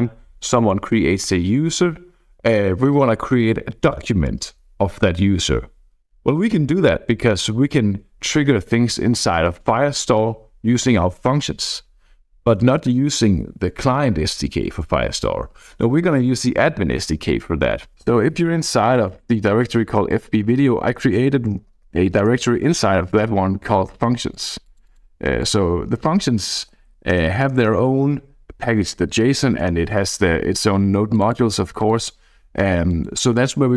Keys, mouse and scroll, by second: 18.0 c, 18.3 d, 21.5-22.5 typing, 24.3-25.3 drag, 25.7-27.9 typing, 27.5 Return, 29.3 BackSpace, 29.4 l, 29.6 Return, 31.1 click, 31.7 click, 32.9 click.